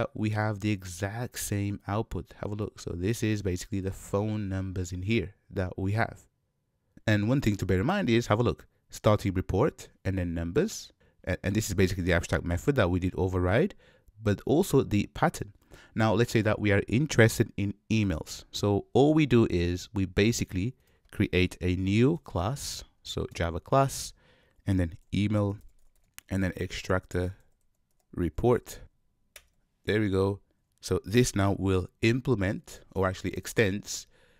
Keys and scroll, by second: 22.2 ctrl+n, 33.7 Return.